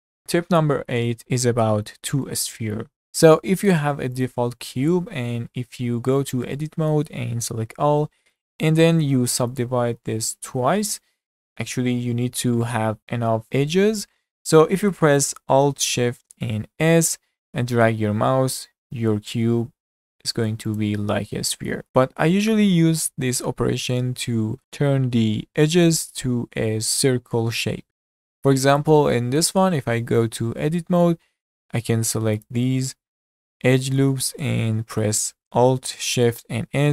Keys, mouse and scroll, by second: 4.2 click, 5.4 Tab, 6.6 middle click, 7.5 a, 8.3-10.7 right drag, 10.7 shift+r, 11.4-13.0 middle drag, 16.7 alt+shift+s, 21.5 middle click, 28.8 click, 29.1-29.4 middle drag, 29.4 Tab, 30.4-31.3 middle drag, 31.3-31.6 scroll up 2, 31.6-32.4 shift+middle drag, 32.4 alt+click, 33.7-36.7 shift+middle drag, 36.7 alt+shift+s.